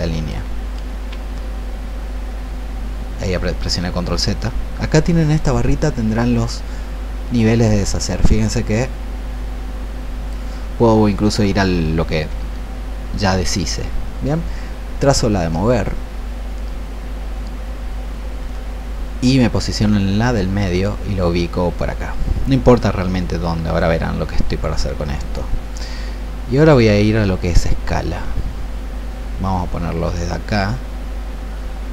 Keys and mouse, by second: 0.9 ctrl+z, 6.3-13.5 drag, 18.6-31.9 drag.